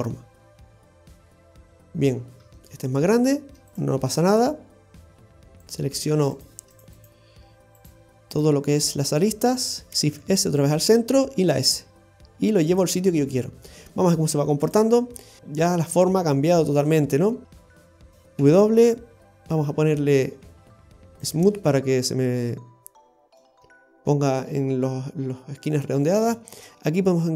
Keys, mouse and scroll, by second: 0.0 Tab, 0.4 scroll down 2, 0.7 middle click, 1.3-1.6 scroll up 2, 1.6 shift+middle click, 2.1-2.6 scroll up 2, 2.6 shift+middle click, 3.7 right click, 4.2 alt+shift+right click, 4.3 right click, 5.7 right click, 6.4 right click, 6.8 alt+shift+right click, 7.0 alt+shift+right click, 7.8 alt+shift+right click, 8.4 alt+shift+right click, 9.4 alt+shift+right click, 10.1 shift+s, 11.2 s, 13.0-13.4 scroll down 2, 13.4 middle click, 14.6 click, 15.0-15.4 scroll up 2, 15.4 middle click, 19.5 w, 19.6 Tab, 20.4 w, 23.1-23.5 scroll down 1, 23.5 middle click, 26.0-26.3 scroll up 2, 26.4 shift+middle click, 26.7 scroll up 1, 27.1 middle click.